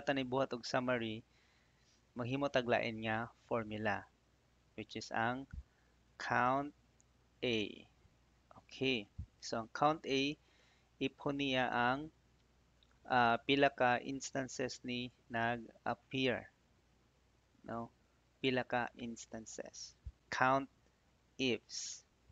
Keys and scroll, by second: 20.2 Up.